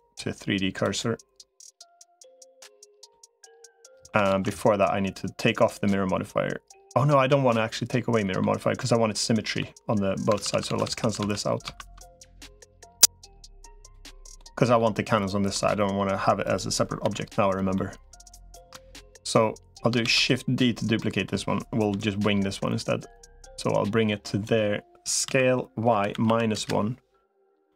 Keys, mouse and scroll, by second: 2.0 middle click, 3.7 middle click, 4.4 ctrl+z, 7.3 middle click, 9.1 middle click, 10.4-11.0 ctrl+z, 11.4 ctrl+z, 12.2 middle click, 13.6 click, 14.1 middle click, 15.3 middle click, 16.8 l, 17.6 middle click, 19.8 shift+d, 20.8 middle click, 21.8 KP_3, 23.2-24.2 drag, 25.0 s, 27.5 middle click.